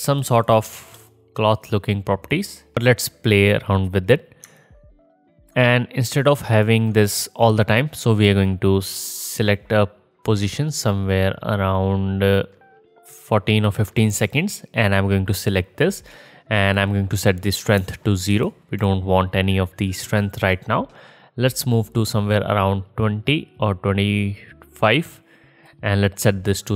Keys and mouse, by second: 5.8-7.2 middle drag, 7.2-8.3 drag, 8.3 middle click, 8.6-9.2 drag, 9.5-26.7 drag.